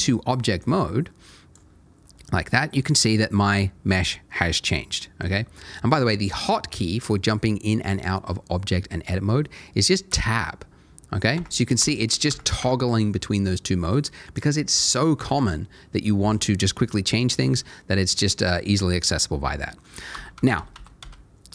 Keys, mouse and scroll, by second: 0.6 click, 2.0 middle click, 10.1 Tab, 11.3 Tab, 11.8 Tab, 12.3 Tab, 12.6 Tab, 15.3 Tab, 17.4 Tab, 20.1 ctrl+z, 20.3 ctrl+z, 20.5 ctrl+z, 20.7 ctrl+z, 21.0 ctrl+z.